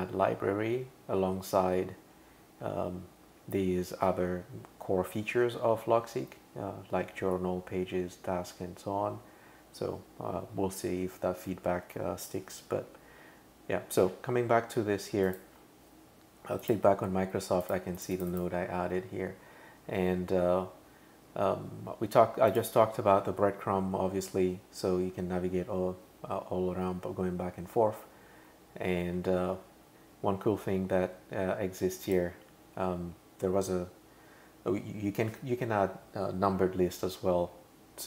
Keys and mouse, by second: 15.3 click, 16.6 click, 17.6 click, 18.0 click, 18.1 click, 18.3 click, 18.9 super+[, 22.5 click, 29.2 super+[, 32.1 click.